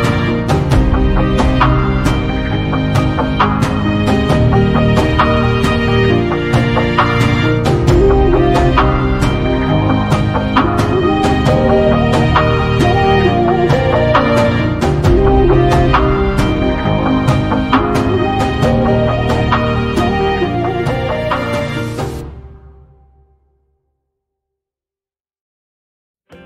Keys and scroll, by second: 2.0 space, 15.5 q, 15.9 space, 24.9 m.